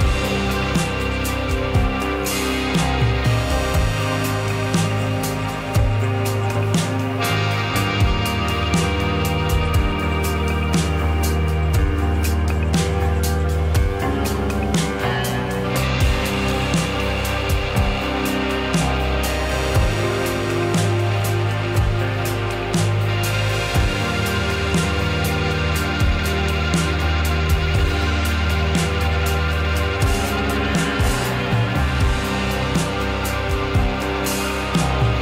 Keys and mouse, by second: 3.1-3.7 drag, 5.7 click, 7.2-10.6 drag, 11.6 click, 13.8-15.1 drag, 17.5 click, 18.0-19.3 drag, 20.0 click, 20.6 click, 23.6 click, 26.4-27.1 drag, 27.5-30.2 drag, 30.2 Tab, 33.2 l, 34.3-34.8 drag.